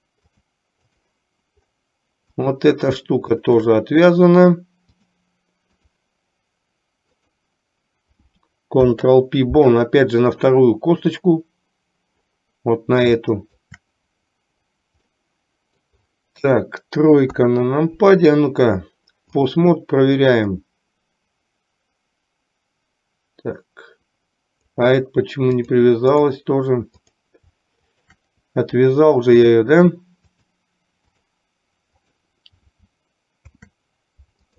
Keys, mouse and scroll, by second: 0.5 click, 2.5 click, 3.6 shift+click, 5.1-6.1 drag, 7.2 click, 8.8 ctrl+p, 10.6-11.3 middle drag, 13.3-13.8 shift+middle drag, 15.3-16.0 middle drag, 17.3 KP_3, 19.3 click, 20.6-24.8 drag, 25.7 click, 28.0 shift+click, 30.3-31.6 drag, 32.1 click, 33.5 ctrl+p.